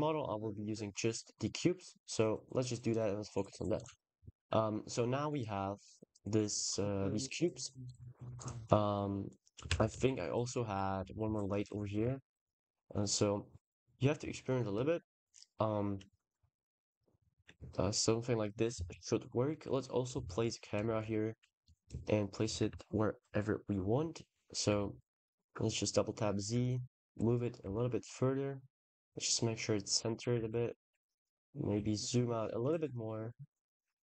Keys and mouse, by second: 1.9 click, 3.6 click, 4.1 x, 7.2 ctrl+s, 7.7 click, 8.7 click, 9.5 shift+d, 9.8 y, 10.6 drag, 10.9 g, 11.1 z, 11.7 r, 11.9 r, 14.7-15.1 shift+middle drag, 20.7 shift+a, 23.1 ctrl+alt+KP_0, 24.8 g, 25.0 z, 25.2 z, 26.5 click, 26.6 g, 26.9 x, 27.5 y, 30.5 g, 30.8 z, 30.9 z.